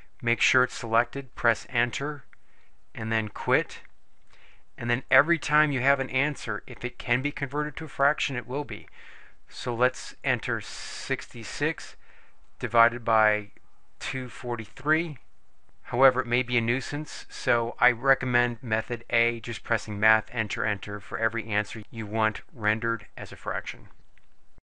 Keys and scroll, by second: 1.3 Return, 5.2 Return, 11.2 6, 11.6 6, 13.7-15.3 typing, 15.4 Return.